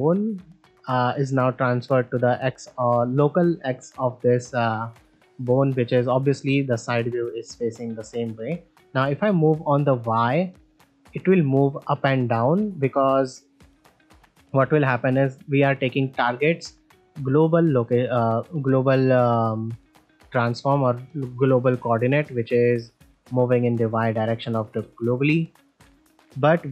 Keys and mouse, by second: 6.5-7.2 middle drag, 7.6 click, 11.7-12.0 middle drag, 12.9 middle drag, 13.8 click, 16.5 click, 22.6 middle drag, 24.7 middle drag.